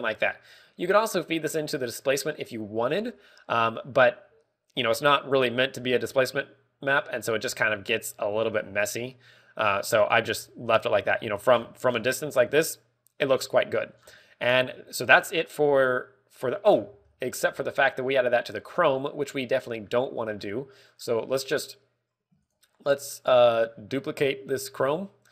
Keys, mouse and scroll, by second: 0.3 scroll down 5, 0.7 middle click, 1.8 click, 8.1 scroll up 1, 9.8 scroll up 5, 10.6 click, 12.5-13.0 scroll down 6, 14.5-15.0 scroll down 5, 15.6 shift+middle click, 15.6 scroll down 3, 18.0 middle click, 18.0 scroll down 3, 18.3 scroll up 1, 19.3 scroll up 2, 20.5 middle click, 21.3 middle click, 22.0 click, 23.4 click.